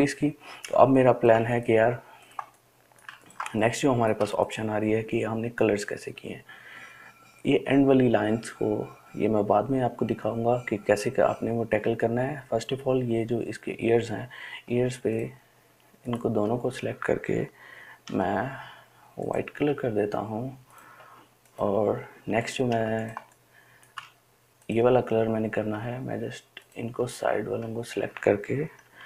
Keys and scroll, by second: 1.4 ▯, 18.4 i, 23.1 ctrl+space.